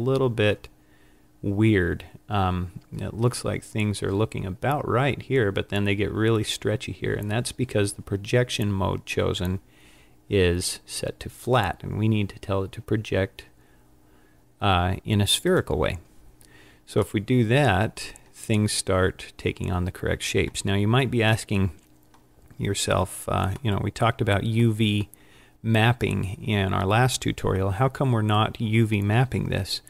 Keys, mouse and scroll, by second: 11.6 click, 17.3 middle click, 21.8 middle click, 23.8 middle click.